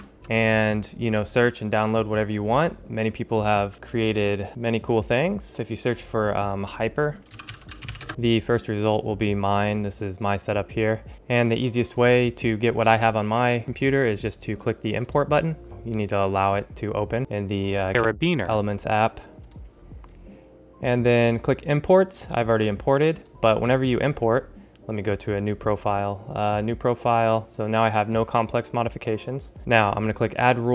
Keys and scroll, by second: 7.0-8.4 typing.